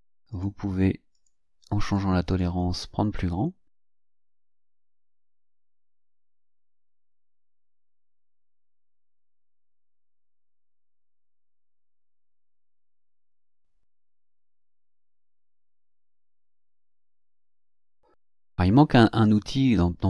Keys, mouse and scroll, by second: 0.3 click, 1.1 click, 1.8 click, 2.3 click, 4.0 click, 5.1 click, 6.7 click, 9.0 click, 10.4 click, 11.2 click, 11.9 click, 13.1 click, 15.1 click, 15.7 click, 16.4 click, 17.1 click, 19.2 click.